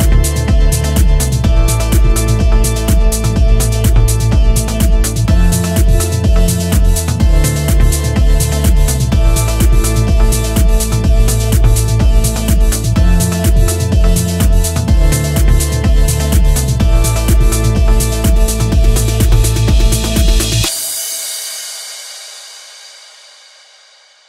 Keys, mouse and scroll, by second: 0.1 click, 0.8 g, 1.1 click, 1.2 g, 5.7 click, 6.3 ctrl+r, 18.9 click, 19.4 g, 20.6 click, 20.7 g, 23.1 click, 23.3 g.